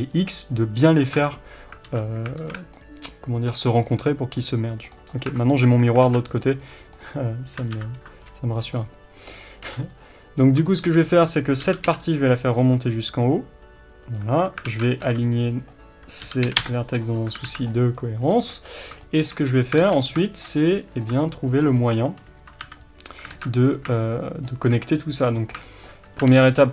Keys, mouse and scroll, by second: 0.2 click, 1.1 Tab, 1.9 alt+a, 2.4 alt+z, 2.7-5.0 middle drag, 5.2 click, 5.3 Tab, 5.4-14.1 middle drag, 6.1 alt+a, 7.7 ctrl+KP_7, 8.8-9.4 scroll up 1, 9.4-10.4 scroll down 1, 10.4 b, 11.7 g, 14.1 click, 14.6 alt+z, 15.3 b, 17.5 alt+z, 17.7-26.7 middle drag, 18.7 scroll up 2, 19.5-19.8 scroll up 2, 19.8 alt+a, 20.0 scroll down 2, 21.8-22.6 scroll down 2, 22.6 KP_7, 23.3 alt+z, 23.6-23.9 scroll up 2, 25.3 scroll up 2, 26.3 ctrl+r.